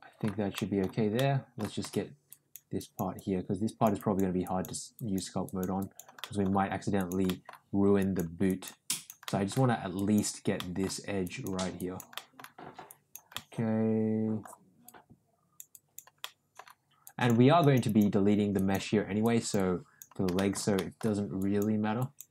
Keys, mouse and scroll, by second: 0.5 middle click, 1.1 middle click, 2.2 click, 2.7 click, 3.1 click, 3.9 click, 4.4 click, 4.9 click, 5.4 click, 5.8 click, 6.2 middle click, 6.9 click, 7.3 middle click, 7.9 click, 8.5 click, 8.9 click, 9.3 middle click, 9.9 click, 10.5 middle click, 11.2 click, 11.8 click, 12.1 middle click, 12.8 click, 13.3-14.5 middle drag, 14.8 click, 15.7 click, 16.2 middle click, 17.0 click, 17.6 click, 17.8 click, 18.5 click, 19.2 click, 20.3 shift+middle click, 20.7 middle click, 21.3 click, 21.9 click.